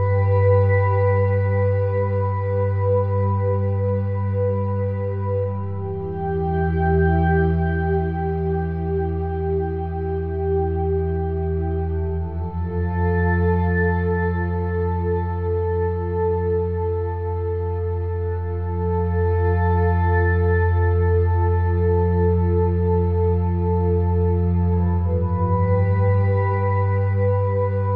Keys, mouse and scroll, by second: 0.2 click, 0.5 middle click, 0.7 click, 1.1 middle click, 1.7-3.3 drag, 3.3 g, 4.1 Tab, 4.8 click, 5.9 click, 6.4 Tab, 6.9 ctrl+r, 7.6 ctrl+r, 9.1 ctrl+r, 10.9 ctrl+z, 11.3 Tab, 11.5 Tab, 11.6 Tab, 11.8-12.6 scroll up 1, 12.7 KP_1, 13.6 click, 14.4 middle click, 15.1 shift+d, 15.6 click, 16.1 r, 17.3 click, 20.9 shift+a, 21.9 s, 22.5-23.6 drag, 23.8 click, 24.5 s, 26.1 middle click, 26.4-27.4 drag, 27.8 middle click.